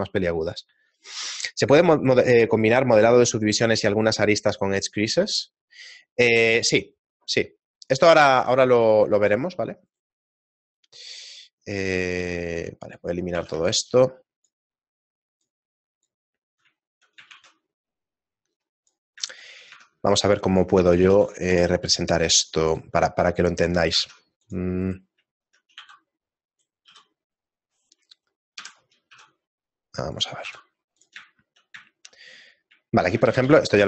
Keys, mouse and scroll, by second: 8.9 right click, 9.1 shift+right click, 10.1 right click, 12.2 x, 16.9 click, 16.9 shift+middle click, 18.2 shift+a, 22.5 Tab, 22.5 ctrl+r, 24.2 ctrl+Tab, 24.2 right click, 24.9 right click, 25.4 shift+middle click, 26.6 e, 27.3 s, 28.6 ,, 29.1 s, 30.6 e, 31.3 shift+middle click, 32.1 shift+middle click, 33.3 ctrl+z, 33.3 shift+middle click, 33.6 ctrl+z.